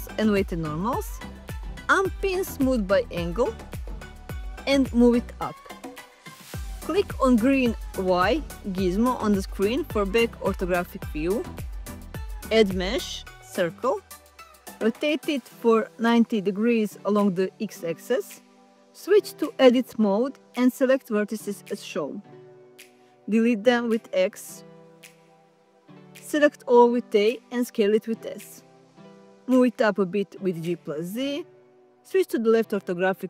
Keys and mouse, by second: 0.8-3.4 drag, 4.5-6.0 drag, 8.2 click, 11.8-15.0 drag, 16.1 r, 16.6 x, 16.8 9, 17.1 0, 18.0 Return, 20.4 Tab, 20.6 1, 22.3 click, 24.1 x, 25.8 Tab, 26.3 a, 26.6 s, 29.6 s, 31.5 click, 32.1 g, 32.3 z.